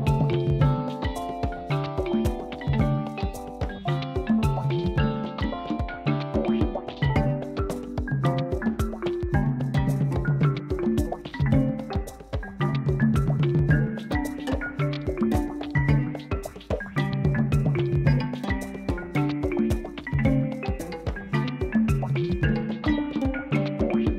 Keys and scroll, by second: 2.5 u, 4.1 Tab, 7.8 u, 10.2 Tab, 21.4 s, 23.7 Tab.